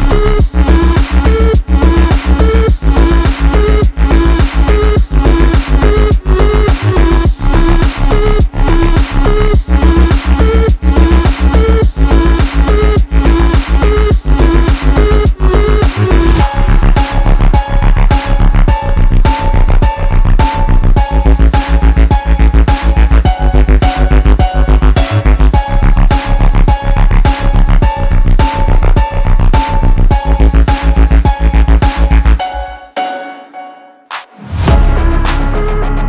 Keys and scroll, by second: 20.0 space, 25.7 space, 35.4 space.